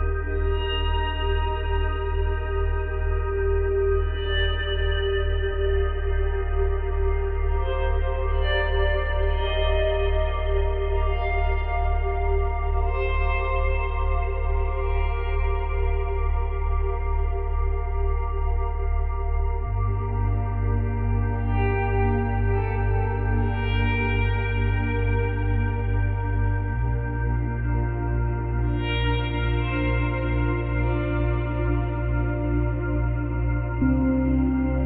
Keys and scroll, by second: 4.0 space, 6.4 space, 8.8 space, 11.5 space, 12.5 space, 13.3 space, 19.0 space, 20.8 space, 23.0 space, 25.4 space.